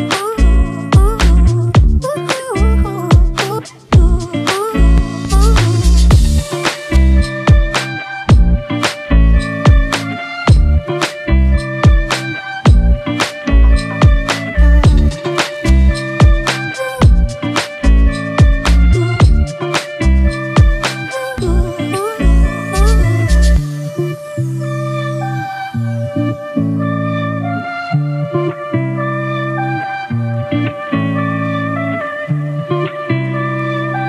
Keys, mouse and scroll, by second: 0.6 double click, 20.0-20.5 scroll up 1, 22.6 e, 32.5 ctrl+t.